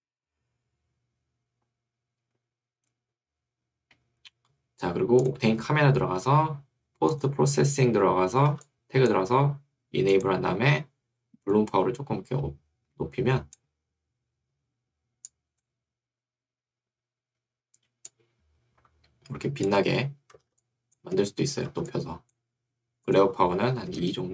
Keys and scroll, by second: 9.3 Escape, 21.1 Escape, 22.5 Escape, 23.9 2, 24.1 Return.